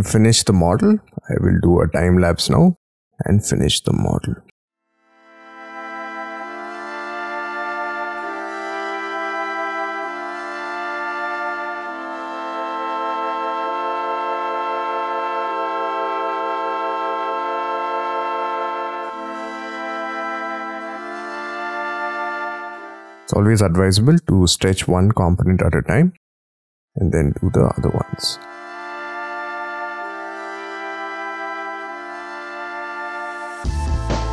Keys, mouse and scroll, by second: 2.0 scroll down 5, 3.8-4.3 scroll up 8, 4.8 scroll up 1, 4.9 scroll down 5, 5.0 scroll up 1, 5.1 shift+middle click, 5.8 shift+click, 5.9 shift+middle click, 6.0-6.5 scroll up 27, 6.5 s, 6.8 y, 7.6 scroll down 25, 8.0 middle click, 8.2 shift+middle click, 9.7 y, 9.7 scroll down 1, 9.7 space, 9.9 shift+middle click, 10.0-10.5 scroll up 40, 10.5 middle click, 10.8 middle click, 11.1-11.7 scroll down 24, 11.4 shift+middle click, 11.7 shift+middle click, 11.8-12.6 scroll up 13, 12.2 middle click, 12.6 middle click, 12.8-13.2 scroll down 27, 13.2 m, 14.0 shift+click, 14.1 space, 14.2 scroll up 5, 14.3 s, 18.8-20.6 typing, 18.9 middle click, 19.1 scroll up 1, 22.7 middle click, 22.9 space, 23.4 Delete, 24.4-25.5 scroll up 11, 28.0 middle click, 29.8 scroll down 17, 30.0 scroll up 5, 31.9 middle click, 32.0 scroll up 5, 32.3 y, 32.7 scroll up 10, 33.0 middle click.